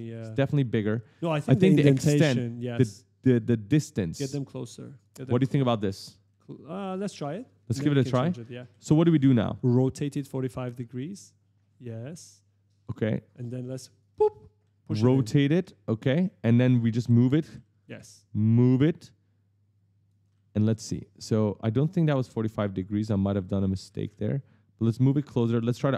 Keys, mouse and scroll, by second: 1.7 click, 5.1 right click, 7.2-9.4 typing, 10.7 click, 13.9 right click, 13.9-17.5 typing, 18.5 click, 20.0 right click, 20.1 a, 22.0 click, 22.8-23.6 typing, 23.0 right click, 24.7 click.